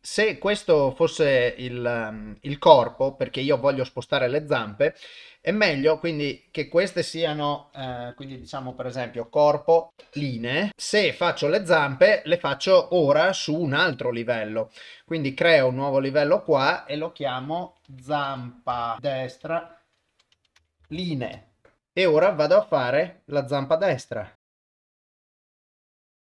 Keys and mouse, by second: 6.4-10.0 drag, 15.7 click, 16.5-21.3 drag, 23.8 click, 24.5 ctrl+z, 24.5 shift+click, 25.0 shift+click, 25.2 ctrl+z, 25.2 shift+click, 25.5 shift+click, 25.7 ctrl+z, 25.8 shift+click.